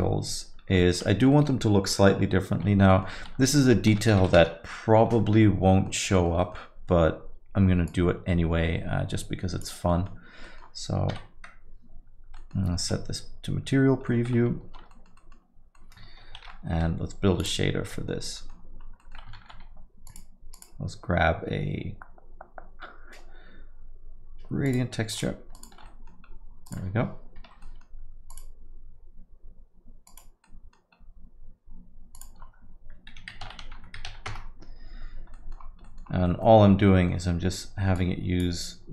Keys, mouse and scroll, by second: 0.0 KP_Divide, 0.6 scroll up 1, 0.8 alt+middle click, 1.1-1.5 scroll down 2, 1.3 middle click, 2.9 alt+middle click, 3.2 Tab, 3.4 alt+middle click, 3.9 s, 5.1-5.9 scroll up 6, 5.7 middle click, 6.1 alt+middle click, 6.4 middle click, 7.9 click, 9.9 middle click, 10.4 middle click, 11.1 KP_Divide, 12.4 middle click, 12.7 z, 14.0 middle click, 14.7 Tab, 14.9 alt+middle click, 15.2 middle click, 15.7 middle click, 16.4 shift+F3, 17.4 click, 18.2 middle click, 18.4 middle click, 18.8 scroll down 1, 19.0 middle click, 19.4 shift+a, 25.9 ctrl+shift+click, 26.3 middle click, 26.3-26.8 scroll up 3, 26.7 click, 27.7 ctrl+t, 27.7 middle click, 28.0 scroll up 2, 28.3 click, 30.5 middle click, 31.0 scroll up 2, 32.1 click, 35.3 middle click, 35.5-36.1 scroll down 7, 35.8 middle click, 36.2 middle click, 36.6 scroll up 1, 36.8 middle click, 38.0 click.